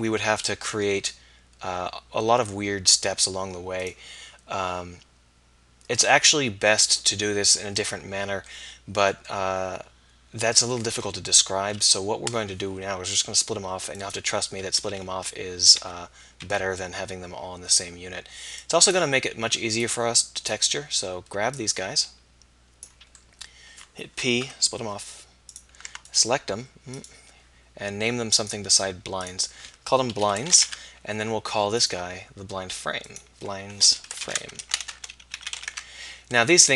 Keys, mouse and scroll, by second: 3.9 click, 8.7-9.8 middle drag, 11.2 KP_1, 14.9 a, 15.8 z, 16.5 b, 20.8 b, 21.6 middle click, 23.4 middle click, 24.5 p, 25.9 Tab, 33.1 click.